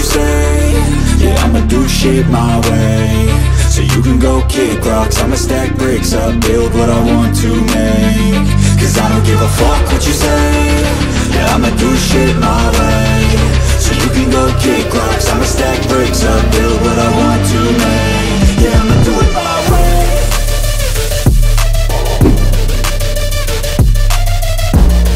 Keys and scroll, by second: 0.9 Up, 1.2 Down, 1.9 Down, 2.0 Up, 4.9 ctrl+t, 6.7 Right, 7.1 Left, 7.1 Right, 8.0 Right, 9.2 Up, 11.0-11.9 typing, 15.1 ctrl+t, 15.9 Left, 16.0 Right, 16.2 Up, 16.3 Left, 18.5 ctrl+t.